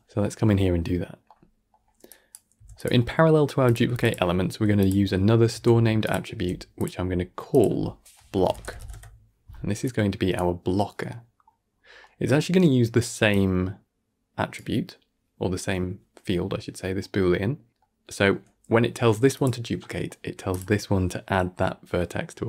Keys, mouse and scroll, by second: 0.1-2.0 middle drag, 2.0 click, 2.4 g, 2.9 middle click, 3.2-3.5 scroll up 3, 3.5 click, 3.7 g, 4.7 click, 5.4 shift+d, 6.2 g, 6.9-7.4 scroll up 4, 7.4-9.8 drag, 11.6 scroll down 7, 11.9-13.2 middle drag, 13.2 click, 16.7-19.2 middle drag, 19.2 click, 19.7-20.4 middle drag, 20.4 click.